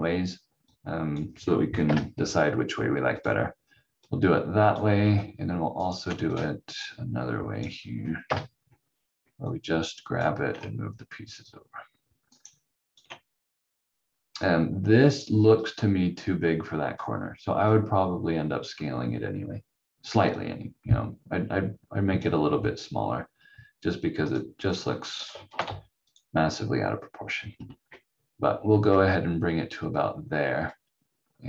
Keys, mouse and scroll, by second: 1.8 Delete, 3.2 click, 5.8 ctrl+right click, 8.2 Delete, 9.5 click, 14.2 scroll up 1, 15.8 click, 25.6 c, 30.7 click.